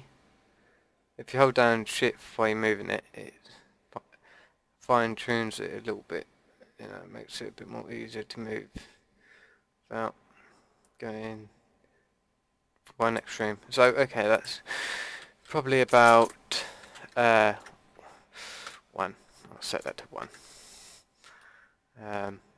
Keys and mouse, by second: 13.7-16.0 drag, 16.0 Left, 16.2 Left, 21.4 click.